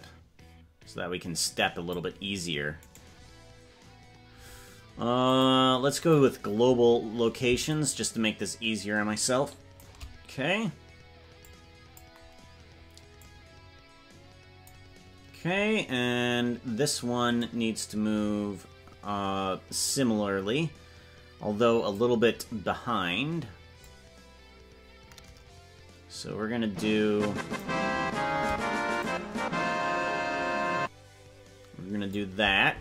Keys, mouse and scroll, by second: 3.2 right click, 5.3-6.3 drag, 7.7-9.8 shift+drag, 11.5 click, 13.2-14.7 drag, 17.6 right click, 19.8 click, 24.0-27.7 drag, 29.0-32.2 shift+drag.